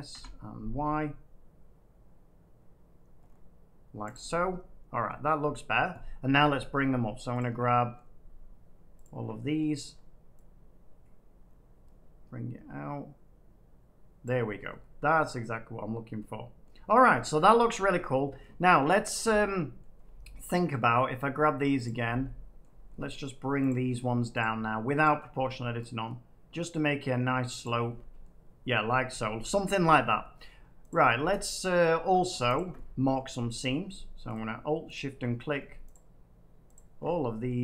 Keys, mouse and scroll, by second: 0.0 y, 2.3-3.2 scroll down 3, 3.1 scroll up 2, 3.2 scroll down 1, 4.1 middle click, 4.1 click, 5.0 middle click, 6.7 middle click, 7.3 middle click, 7.3 shift+click, 7.9 middle click, 9.0 shift+click, 9.5 middle click, 10.3 middle click, 11.4-12.8 scroll down 11, 12.8 scroll down 1, 13.1 middle click, 14.2 click, 14.5 middle click, 16.6 middle click, 16.9 Tab, 17.4 middle click, 17.8 scroll up 1, 18.6 scroll, 19.7-20.4 scroll, 20.7 Tab, 21.8 click, 22.5 middle click, 23.0 middle click, 23.0 scroll down 1, 23.6 click, 24.3 shift+click, 25.0 shift+click, 27.6 click, 28.1 middle click, 29.6 middle click, 30.3 middle click, 30.8 click, 31.3 click, 31.5 click, 32.5 click, 33.1 middle click, 33.6 middle click, 34.2 click, 34.9 click, 35.8 click, 36.7 click, 37.4 middle click.